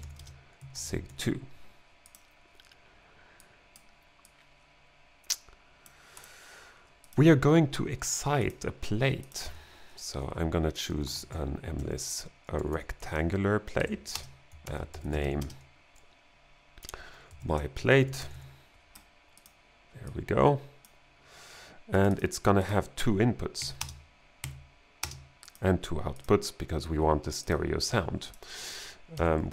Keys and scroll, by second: 0.0-1.6 typing, 9.5 n, 10.7-15.7 typing, 13.8 Right, 14.6 alt+g, 17.2-18.8 typing, 23.6 2, 23.8 space, 24.4 2, 25.1 space, 29.2-29.5 typing.